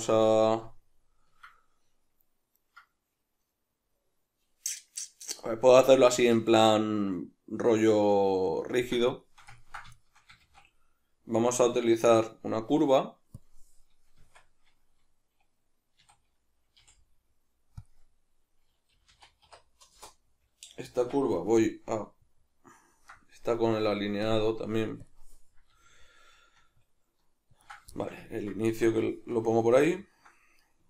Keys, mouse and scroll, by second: 10.4 shift+a, 14.2 Tab, 16.0 a, 16.8 v, 18.9-23.1 middle drag, 18.9 g, 20.1 Return, 21.0 Tab, 21.6 g, 23.1 right click, 24.3-27.7 drag, 25.7 g, 27.9-30.6 shift+middle drag, 28.7 Tab, 30.6 right click.